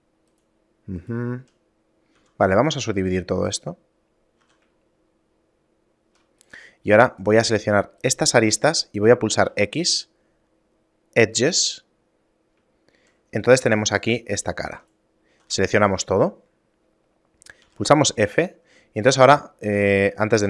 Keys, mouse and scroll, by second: 0.4 shift+right click, 1.1 shift+right click, 2.2 w, 4.4 a, 4.9 shift+middle click, 6.4 right click, 7.2 shift+right click, 7.6 right click, 9.5 x, 12.8 shift+middle click, 13.4 right click, 14.0 shift+right click, 14.4 shift+right click, 14.8 right click, 15.4 a, 15.6 a, 17.7 f, 18.2 a, 19.3 ctrl+a, 20.0 right click.